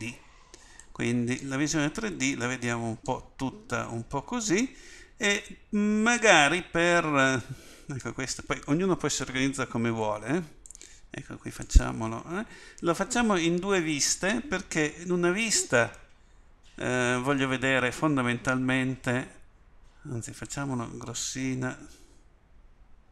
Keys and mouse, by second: 2.6 click, 2.7 middle click, 3.6 middle click.